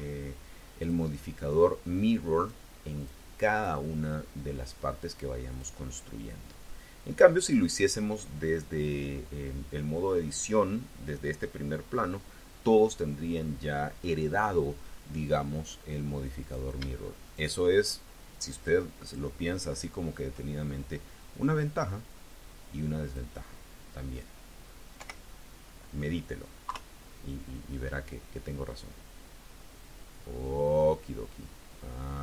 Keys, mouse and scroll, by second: 0.7 click, 2.3 click, 2.9 click, 3.4 click, 5.3 click, 6.9 click, 16.3 click, 17.1 shift+click, 18.4 shift+click, 19.5 shift+click, 21.1-23.2 drag, 24.8 o, 26.5 KP_3, 27.7 scroll down 2, 29.6-32.2 drag.